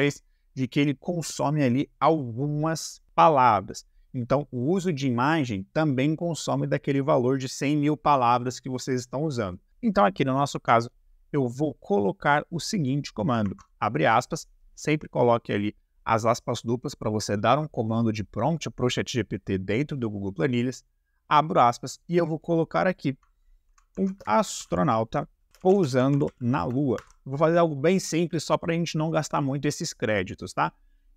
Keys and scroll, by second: 10.5 shift+`, 13.4 shift+`, 23.7-27.0 typing.